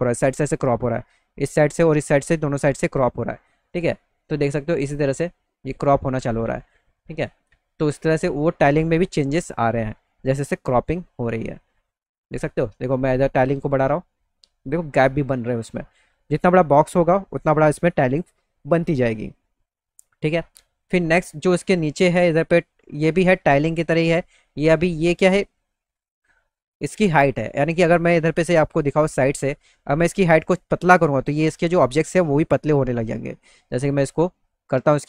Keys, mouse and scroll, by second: 5.1 click, 7.3-14.7 drag, 24.9-27.8 drag, 28.3-29.4 alt+middle drag, 30.7 alt+middle click, 31.5 middle click, 32.1-33.4 alt+middle drag.